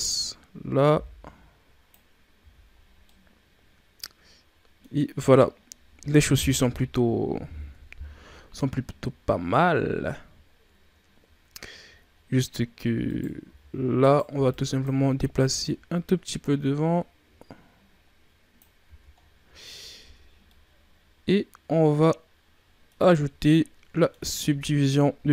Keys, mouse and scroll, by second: 2.3 z, 2.7 scroll down 4, 3.0-5.1 middle drag, 5.1-6.5 scroll up 3, 6.5 KP_1, 7.6 KP_3, 8.7-10.4 scroll up 4, 10.4-11.9 shift+scroll up 2, 11.9-13.0 ctrl+scroll up 2, 13.0 right click, 13.4 z, 13.9 right click, 14.2 b, 15.5-18.6 drag, 18.7 z, 19.1-19.6 scroll down 6, 19.9 Tab, 20.1 scroll down 2, 20.4-23.1 middle drag, 23.1 Tab, 23.4 middle click, 24.3 Tab.